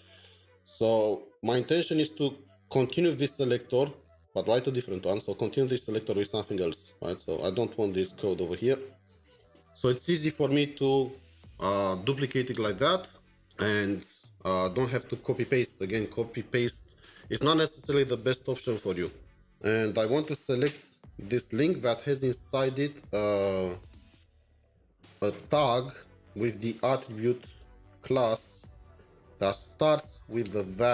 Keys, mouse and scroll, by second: 9.0 alt+shift+Down, 20.1 BackSpace, 22.6 typing, 24.0 typing, 25.6-26.3 typing, 27.7-28.9 typing, 30.7-30.9 typing.